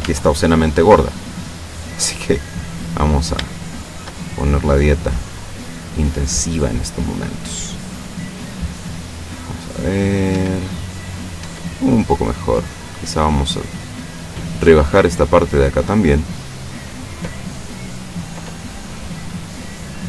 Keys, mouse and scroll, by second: 0.1 Tab, 1.2 right click, 2.2 click, 3.6 shift+right click, 4.3-6.0 shift+drag, 6.1-7.1 middle drag, 8.5 click, 9.3-10.4 middle drag, 10.3 Tab, 11.5 Tab, 11.9 middle click, 13.3 right click, 13.8 middle click, 15.0-16.4 drag, 18.3-20.0 middle drag.